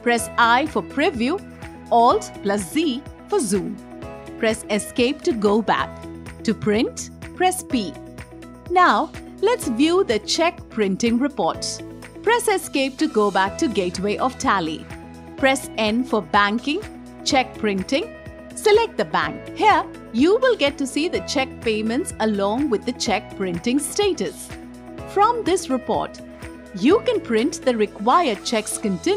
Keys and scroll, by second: 0.3 i, 2.6 alt+z, 4.8 Escape, 7.5 p, 12.1 Escape, 15.2 n.